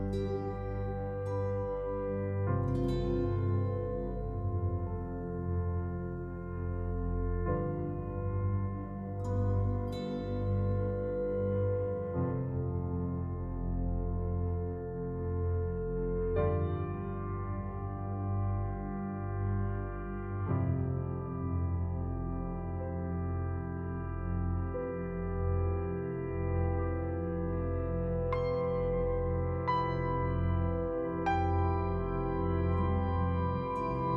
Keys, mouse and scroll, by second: 3.6 click, 17.9 click, 24.9-25.5 scroll up 1, 30.2 click.